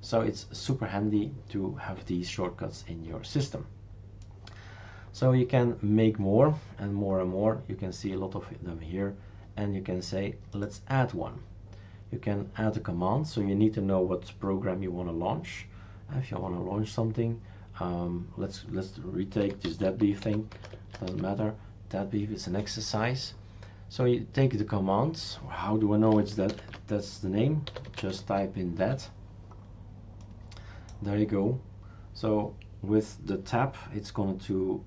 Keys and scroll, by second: 19.1-21.6 typing, 26.5 ctrl+alt+t, 27.4-28.7 typing, 28.8 Tab.